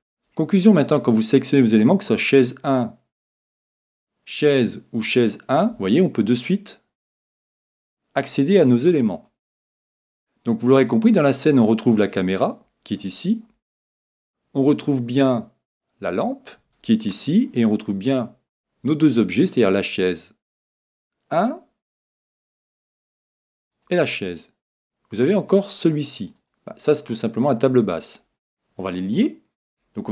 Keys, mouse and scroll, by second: 2.0-3.9 drag, 5.2-7.1 drag, 6.2-8.1 middle drag, 12.1-14.0 drag, 13.0-15.0 middle drag, 15.0 scroll down 1, 16.0-18.2 drag, 18.2-19.3 scroll up 1, 19.3-20.1 scroll up 1, 19.4-21.2 drag, 24.7-28.3 drag, 28.8-30.1 middle drag.